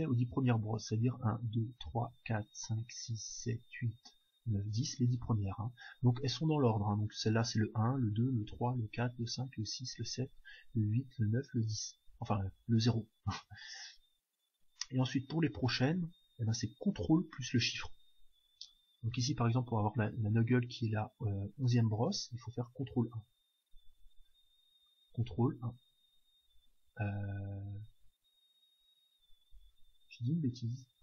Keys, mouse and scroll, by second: 25.6 ctrl+1, 28.1 shift+1.